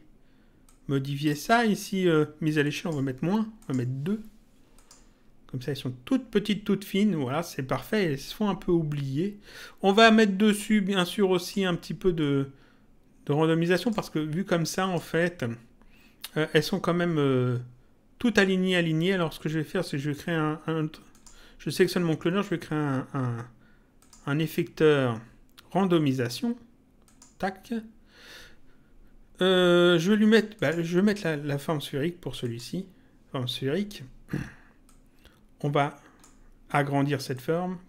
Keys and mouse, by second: 0.6 click, 2.6 click, 4.7 click, 11.0 click, 12.2 click, 14.8 click, 21.1 click, 24.0 click, 27.0 click, 30.5 click, 32.4 click, 34.8 click, 37.3 click.